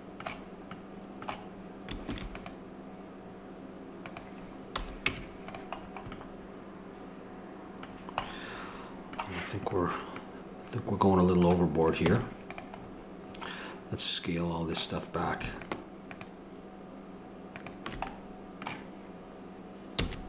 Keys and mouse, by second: 2.1 ctrl+r, 4.7 a, 5.1 Tab, 12.0 Tab, 15.6-20.0 drag, 20.0 s.